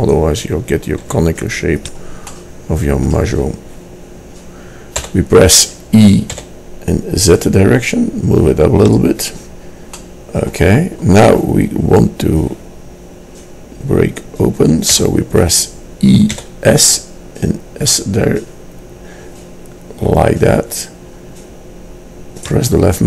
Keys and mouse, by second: 1.1 s, 2.4-4.4 drag, 5.2 e, 10.1 middle click, 15.1 e.